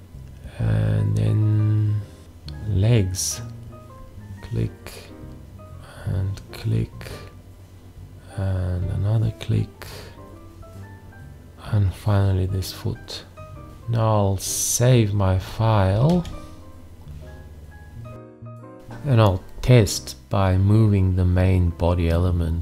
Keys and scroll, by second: 16.1 ctrl+s, 19.3 ctrl+a.